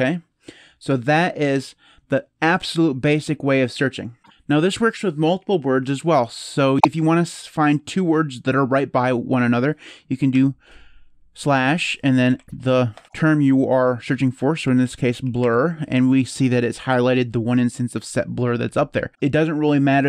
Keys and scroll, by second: 10.1 /, 11.8-13.0 typing, 14.1-15.7 typing.